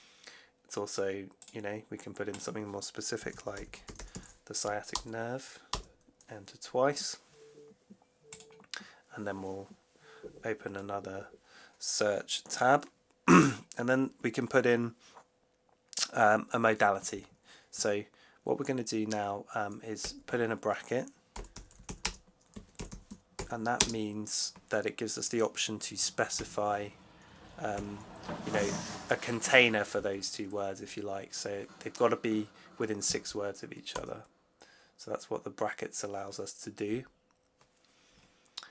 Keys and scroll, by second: 2.9-4.5 typing, 4.8 Return, 5.6 Return, 19.9 shift+9, 21.0-23.7 typing, 26.2 shift+4, 27.7 6, 33.8 Return.